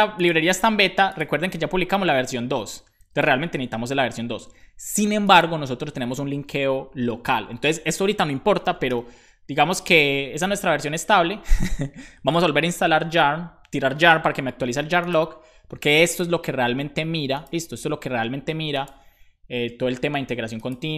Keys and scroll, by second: 2.5 BackSpace, 2.9 super+s, 8.5-9.3 typing, 9.8 Return.